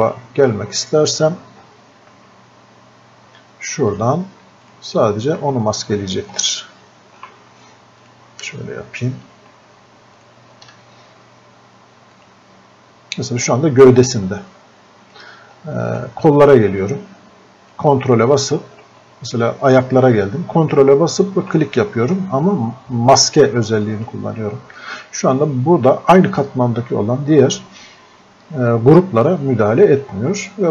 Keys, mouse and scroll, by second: 3.9-16.0 drag, 16.9-19.8 drag, 21.8-27.2 drag, 28.8-30.1 drag.